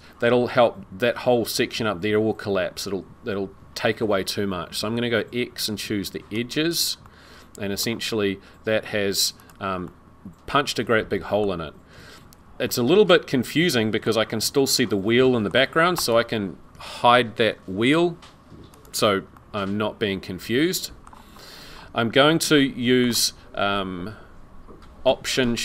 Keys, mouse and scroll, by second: 4.7 x, 7.0 middle click, 9.4 click, 9.8 middle click, 11.5-12.4 scroll down 1, 12.7 middle click, 14.1-14.5 scroll down 1, 14.7-15.2 scroll down 2, 15.2 middle click, 16.0 click, 18.7 click, 19.3 middle click, 21.4-21.7 scroll up 5, 22.5 shift+middle click.